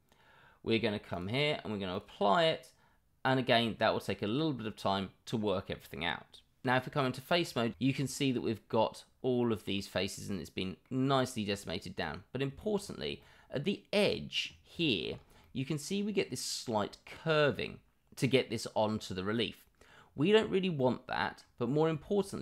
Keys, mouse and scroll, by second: 1.1-6.6 drag, 7.9 middle click, 8.6-9.3 middle drag, 9.5 middle click, 10.6-11.6 middle drag, 12.4 middle drag, 12.8 middle click, 13.2-14.3 middle drag, 14.7 middle drag, 15.4-16.0 middle drag, 16.7-17.6 middle drag, 20.7-21.3 middle drag.